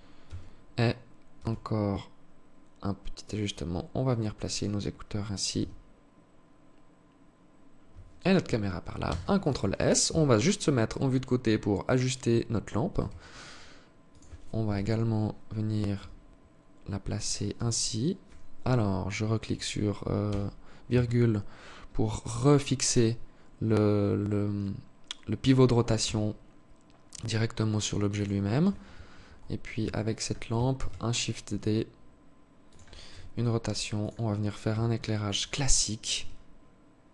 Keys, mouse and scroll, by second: 4.9 g, 8.4 ctrl+s, 9.4 KP_3, 10.0-10.4 scroll down 7, 11.2 right click, 12.3 g, 14.0 KP_7, 15.2 g, 16.8 r, 19.6 ,, 25.3 r, 29.3 alt+shift+click, 30.1 shift+d, 32.4 r, 34.1 g, 35.5 r.